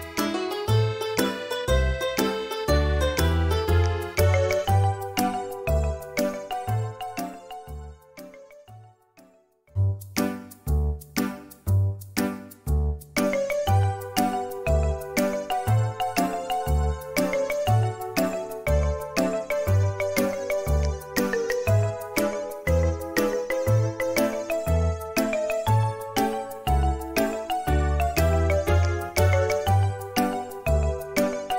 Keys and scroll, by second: 9.9 Delete, 12.8 i, 20.3 space, 21.2 i, 23.9-25.1 typing, 27.2 Delete, 27.2 typing.